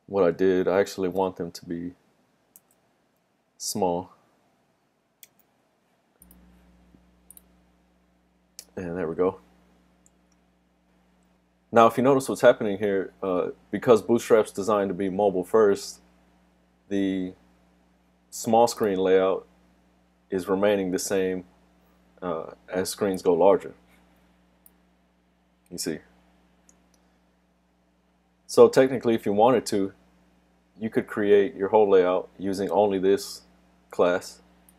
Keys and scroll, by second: 2.6 super+z, 5.4 super+s.